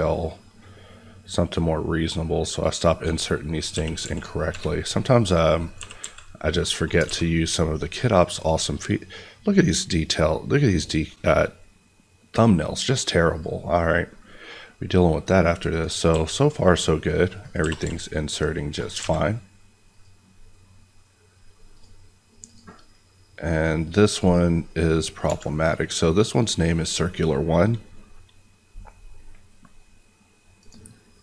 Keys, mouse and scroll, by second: 3.7 g, 4.0 x, 4.4 y, 5.6 click, 5.7 g, 5.9 x, 6.7 click, 7.0 alt+a, 7.4 click, 14.8-15.6 scroll down 1, 15.6 click, 16.0 s, 17.4 click, 17.5 g, 17.7 y, 18.6 click, 18.9 a, 19.9 click, 25.2 Escape, 30.5 click.